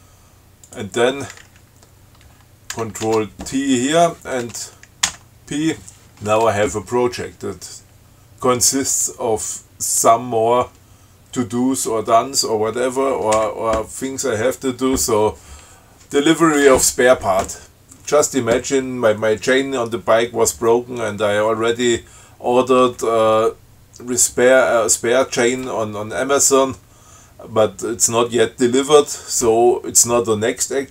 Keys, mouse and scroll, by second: 0.9 click, 2.9 ctrl+c, 3.2 ctrl+t, 5.3 p, 13.6 Down.